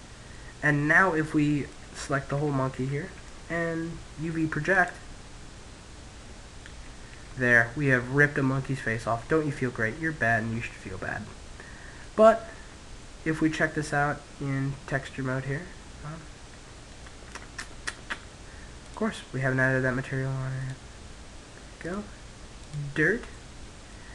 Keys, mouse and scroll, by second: 0.1 Tab, 0.9 Tab, 1.4 a, 1.8 a, 3.2 u, 6.3-12.1 middle drag, 11.7 Tab, 14.4 Tab, 15.6 Tab, 16.2 Tab, 17.9-22.6 drag, 22.6-24.1 middle drag.